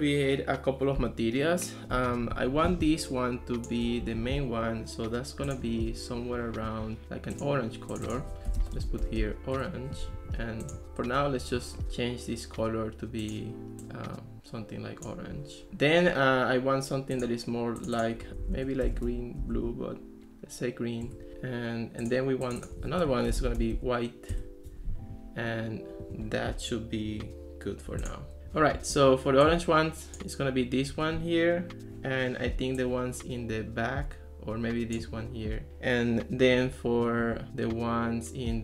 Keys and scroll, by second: 2.7 ctrl+s, 4.1 ctrl+x, 8.4-9.7 typing, 18.3-20.1 typing, 21.1 Return, 23.1-24.4 typing.